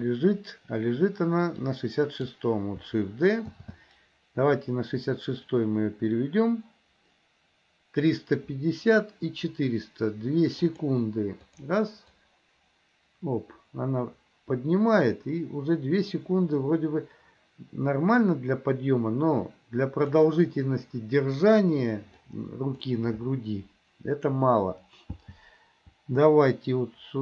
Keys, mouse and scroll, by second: 0.0 click, 1.7-2.4 drag, 3.7 shift+d, 11.7 click, 12.5-20.3 drag, 22.2-22.9 drag, 25.3 g.